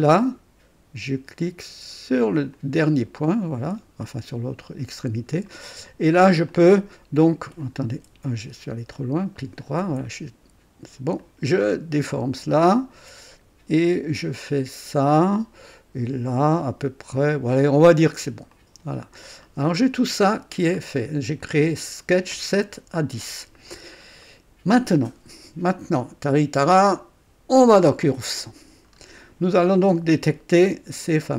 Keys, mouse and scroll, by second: 2.5 click, 3.8 right click, 5.1-5.5 scroll up 1, 5.5 right click, 6.5 click, 7.8 Escape, 7.9 Escape, 9.0 right click, 9.8 Escape, 11.2-14.8 drag, 18.5 click, 19.2-19.7 scroll down 2, 19.8 right click, 20.6 scroll down 2, 23.8 scroll down 1, 24.2 right click, 26.7 click, 28.2 click, 28.9-29.2 scroll up 2, 29.7 right click, 30.7-31.3 drag.